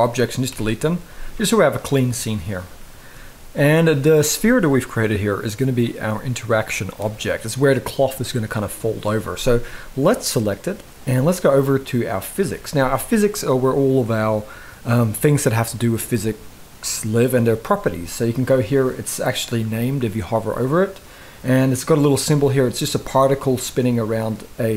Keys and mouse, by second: 0.2 Delete, 1.0 KP_1, 2.5-2.8 shift+middle drag, 9.9 click.